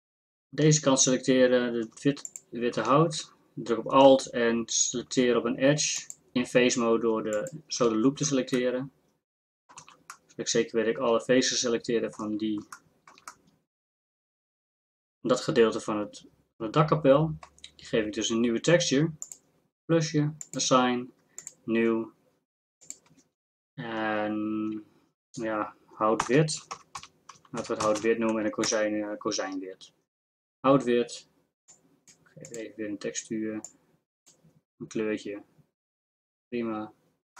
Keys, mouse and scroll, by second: 9.3 middle click, 9.8 z, 11.2 middle click, 12.0 click, 12.2 z, 19.2-22.2 drag.